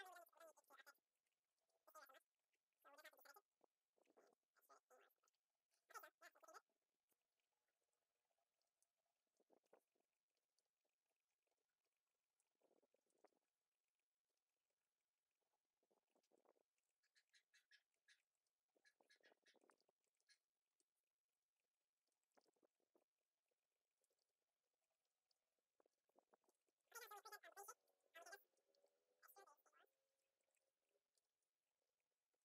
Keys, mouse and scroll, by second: 0.6 Tab, 1.4 click, 1.5 middle click, 1.6 ctrl+z, 1.7 ctrl+z, 1.9 KP_3, 2.2-2.5 middle drag, 2.5 scroll up 2, 2.8 alt+right drag, 2.9 scroll down 2, 3.0 KP_3, 3.1 shift+z, 3.4 c, 4.2 shift+z, 4.4 alt+s, 5.3 Tab, 5.4-5.8 middle drag, 5.8 alt+a, 5.9 middle click, 6.0 scroll up 2, 6.1 Tab, 6.3 alt+a, 6.4 middle drag, 6.4 Tab, 6.5 scroll down 3, 7.1 right click, 7.3 right click, 7.7 f, 7.9 drag, 8.0-8.3 shift+middle drag, 8.3 right click, 8.5 shift+right drag, 8.8 f, 9.0 alt+a, 9.1 scroll down 2, 9.3 right click, 9.7 ctrl+r, 10.0 shift+right click, 10.3 shift+right click, 10.5 shift+right click, 10.6 f, 10.7 alt+a, 10.9 right drag, 11.0 shift+right click, 11.2 shift+right click, 11.4 shift+right click, 11.7 f, 11.9-12.3 shift+right drag, 12.3 shift+right drag, 12.5 f, 12.6 right drag, 12.7 shift+right click, 13.1 shift+right drag, 13.2 f, 13.4 alt+a, 13.6 right click, 13.9 shift+right click, 14.0 shift+right click, 14.2 f, 14.5 alt+a, 14.6 right drag, 14.8 shift+right click, 15.0 shift+right drag, 15.3 shift+right drag, 15.5 shift+right drag, 15.8 e, 16.3-16.7 middle drag, 17.0 middle drag, 17.2 right click, 18.2 right click, 18.4 middle drag, 18.6 alt+a, 18.7 right click, 19.3 scroll down 1, 19.6 right click, 19.8 scroll up 1, 19.9 alt+a, 20.0 right click, 20.2 shift+middle drag, 20.4 alt+a, 20.5 right drag, 20.6-24.1 typing, 21.4 right click, 21.9 shift+right click, 22.0 shift+right click, 22.4 middle click, 22.5 alt+a, 22.6 shift+middle drag, 22.9 right click, 23.3 right click, 23.7 shift+right drag, 23.9 shift+right click, 24.0 shift+right click, 24.3 shift+middle click, 24.4 alt+a, 24.5 right drag, 24.8 right click, 24.9 shift+right drag, 25.1 shift+right click, 25.2 shift+right click, 25.3 f, 25.4 right click, 25.9 shift+right click, 26.0 shift+right click, 26.1 f, 26.2 right click, 26.4 shift+right click, 26.5 shift+right click, 26.6 shift+right drag, 26.7 f, 26.7 scroll down 3, 26.8 alt+a, 26.8 middle drag, 27.0-27.4 scroll up 3, 27.1 shift+middle click, 27.5-28.0 middle drag, 28.0 shift+Tab, 28.2 alt+right click, 28.4 scroll down 2, 28.6-31.6 typing, 28.7-29.1 shift+scroll up 5, 29.0 shift+middle click, 30.1 scroll down 1, 30.4 middle click, 32.0 shift+Tab, 32.1 right click.